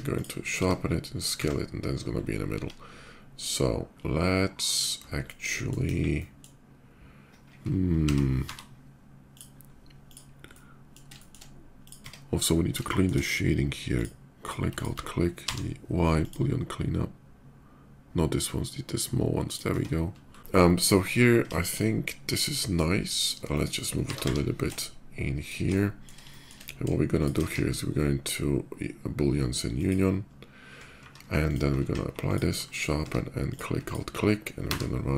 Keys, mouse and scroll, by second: 0.4 s, 1.0 click, 1.8 middle click, 2.3 s, 4.5 click, 5.0-5.5 middle drag, 5.7 KP_5, 5.9 middle click, 7.8 s, 9.1 click, 9.1 y, 9.5-9.8 middle drag, 9.8 click, 10.2-10.7 middle drag, 10.9 shift+drag, 11.0 shift+middle drag, 11.5 click, 11.9 Tab, 12.2 middle click, 12.6 shift+middle click, 13.6 shift+click, 14.1 shift+click, 14.5 alt+click, 15.1 y, 16.0 click, 17.6 middle click, 19.2 click, 19.6 Tab, 19.9 middle click, 20.6 shift+middle click, 20.9 shift+middle drag, 21.3 shift+middle click, 21.5-22.8 shift+middle drag, 22.8 shift+click, 23.1-23.6 shift+middle drag, 23.8 g, 24.2 y, 25.2 shift+click, 25.5 middle drag, 26.0 shift+middle drag, 26.9 click, 27.1 q, 29.5 click, 30.0 middle click, 30.8 shift+2, 31.2 click, 32.0 ctrl+click, 32.2 ctrl+q, 32.4 middle click, 32.7 Tab, 33.2 click, 33.6 alt+click, 34.2 y.